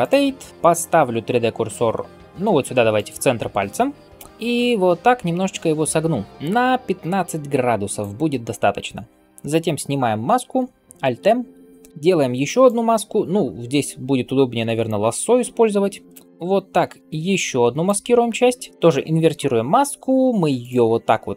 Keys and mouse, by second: 2.8 shift+middle click, 2.8 shift+right click, 11.0 alt+m, 19.1 ctrl+i.